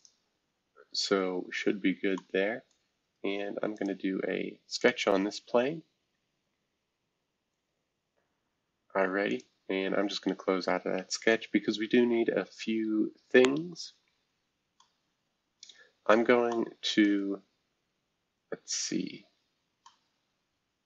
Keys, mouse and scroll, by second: 0.0 click, 1.1 scroll down 3, 2.1 middle click, 3.7 click, 4.8 click, 9.3 click, 11.5-12.2 scroll up 1, 12.2-13.5 scroll up 1, 13.5 scroll down 1, 14.3 scroll up 1, 14.8-16.5 middle drag, 17.0-19.1 middle drag.